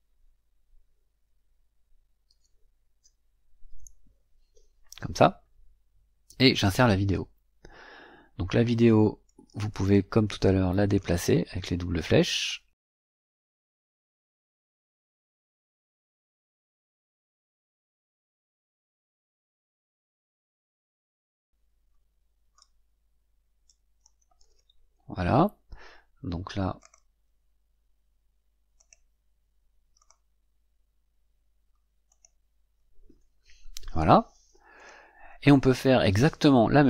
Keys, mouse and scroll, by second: 2.2 shift+,, 2.9 v, 6.4 click, 9.2-11.1 drag, 12.2 click, 14.7-17.2 drag, 18.1-19.4 drag, 22.5-24.1 drag, 26.7 click, 28.7 click, 29.9 click, 32.0 click, 34.7 click.